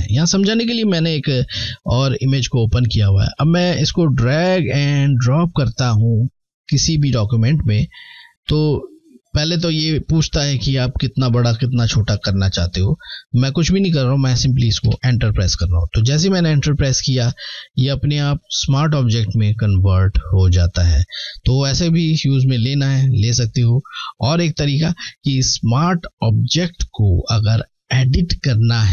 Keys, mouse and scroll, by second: 0.3 typing, 3.7-4.3 typing, 14.1 Return, 18.2 click, 21.4 click.